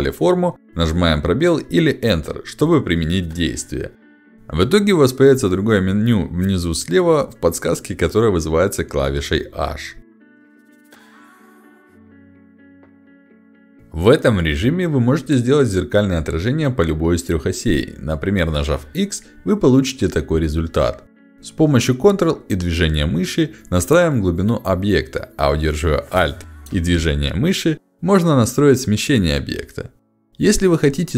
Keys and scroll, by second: 4.6 space, 19.3 x.